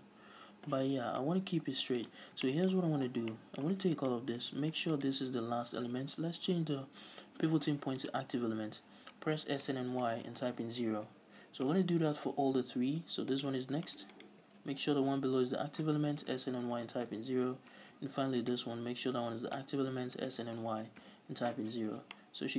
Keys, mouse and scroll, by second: 1.0 scroll down 1, 1.2-4.0 middle drag, 2.1 scroll up 1, 4.0 alt+right click, 4.8 shift+right click, 5.0 shift+right click, 6.6 ., 9.3 s, 11.1 Return, 11.5 a, 13.4 alt+right click, 14.2 alt+right click, 16.0 s, 17.2 Return, 18.5 alt+right click, 20.0 s, 21.2 Return, 21.7 z, 22.2-22.5 middle drag.